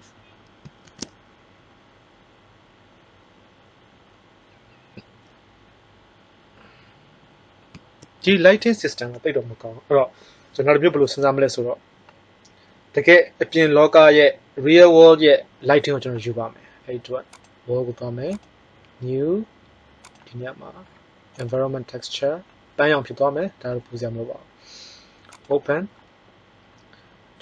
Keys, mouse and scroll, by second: 0.8 shift+z, 17.3-18.4 drag, 18.8-20.0 drag, 25.7-27.0 drag.